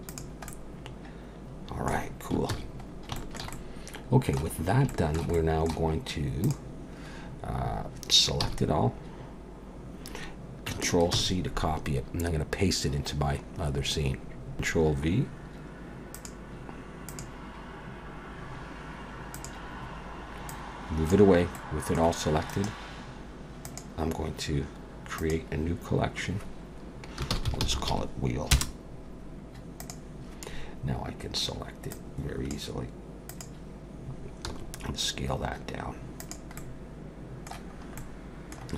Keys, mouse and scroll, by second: 0.1 click, 0.5 middle click, 2.5 ctrl+s, 2.9 scroll down 2, 3.2 shift+middle click, 3.5 middle click, 4.6-4.9 scroll up 2, 4.9 shift+middle click, 5.3 middle click, 6.4 click, 8.5 a, 11.1 ctrl+c.